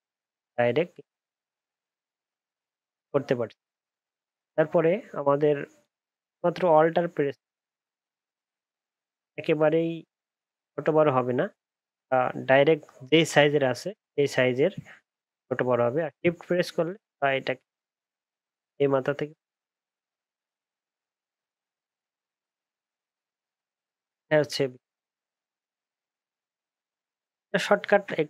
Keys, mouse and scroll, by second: 5.8 shift+click.